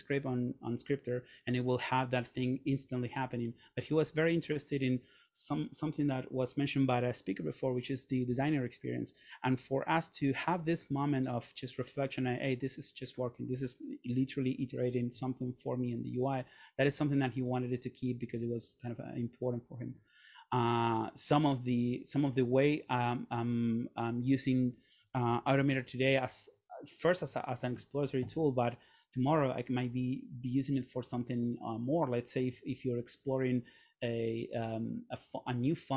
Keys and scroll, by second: 25.7 super+., 27.1 super+..